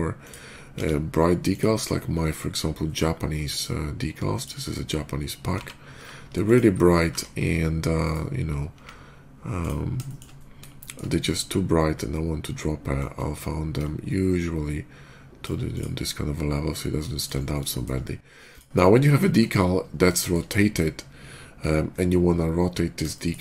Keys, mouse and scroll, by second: 0.1 shift+click, 0.6 d, 1.4 click, 3.3 click, 4.2 click, 5.4 g, 6.3 click, 6.9 d, 7.9-8.2 right drag, 8.2 middle click, 8.6 s, 9.4 click, 9.9 shift+middle click, 10.6 shift+middle drag, 12.8-15.2 shift+drag, 15.6 shift+click, 15.8 shift+middle click, 17.0 shift+middle click, 17.3 shift+middle click, 17.6 shift+middle click, 18.3 shift+click, 19.0 shift+middle drag, 20.0 shift+middle click, 21.8 scroll down 1, 23.0 shift+middle click.